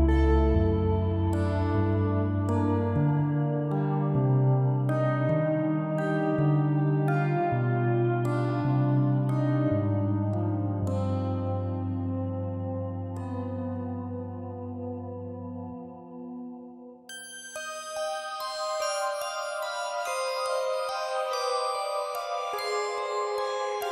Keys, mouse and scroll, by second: 0.0 click, 0.5 shift+d, 1.4 s, 1.9-2.4 scroll down 1, 2.4 click, 3.6 ctrl+p, 4.4 click, 4.5 click, 5.0 g, 6.0 ctrl+z, 6.6 alt+p, 7.5 click, 8.3 shift+click, 9.0 ctrl+p, 10.3 click, 11.6 g, 13.3 middle click, 13.6 ctrl+z, 14.1 click, 15.2 alt+p, 16.3 scroll up 4, 16.6-17.1 shift+middle drag, 17.1 ctrl+z, 17.5 ctrl+z, 17.6 ctrl+z, 17.8-18.3 ctrl+z, 18.4 ctrl+z, 19.2 shift+drag, 19.5 shift+drag, 19.8 shift+click, 20.1 shift+click, 20.6 ctrl+p, 21.3 scroll down 4, 21.6 click, 22.1 g, 23.0 KP_1, 23.6 KP_7.